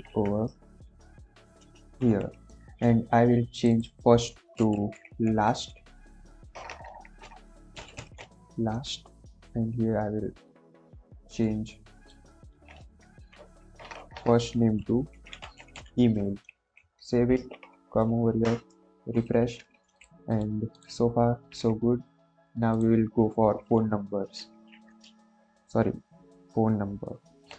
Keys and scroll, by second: 0.1 Right, 1.9 ctrl+v, 4.3-5.5 typing, 6.5-8.6 typing, 13.0 shift+Left, 13.9-16.2 typing, 16.4 ctrl+s, 24.5 ,, 24.9 Return, 27.3 shift+'.